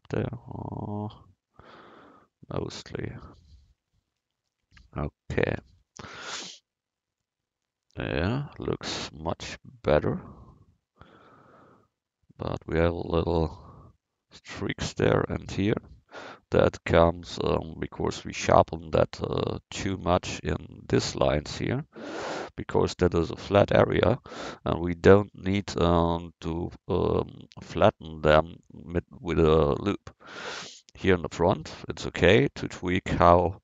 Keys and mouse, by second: 5.6 Tab, 8.1-9.1 middle drag, 9.9-10.7 drag, 10.7-11.6 middle drag, 15.8 Tab, 23.0-33.6 drag.